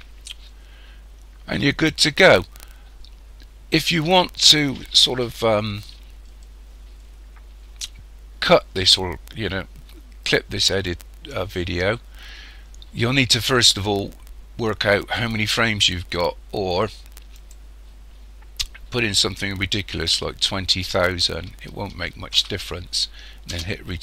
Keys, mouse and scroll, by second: 17.4 click.